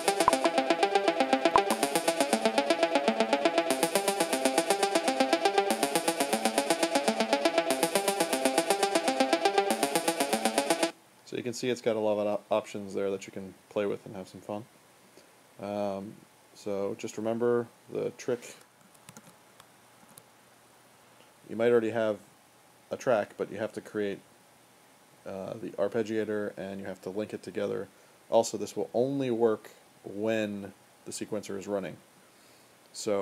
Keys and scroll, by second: 10.6 space, 18.6 super+w, 18.6 `, 19.2 w, 20.0 w.